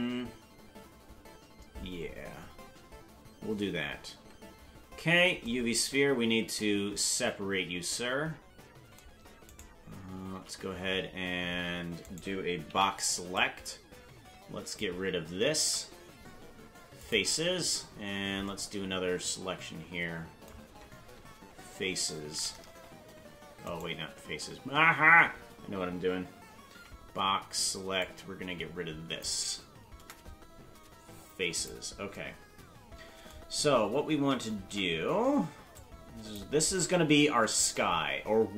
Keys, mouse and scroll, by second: 4.2 Tab, 9.5 right click, 10.3 c, 12.6 b, 15.6 Delete, 22.2 f, 23.6 right click, 26.7 b, 29.9 Delete, 34.7 Tab, 35.7 click, 36.6-36.9 scroll down 6.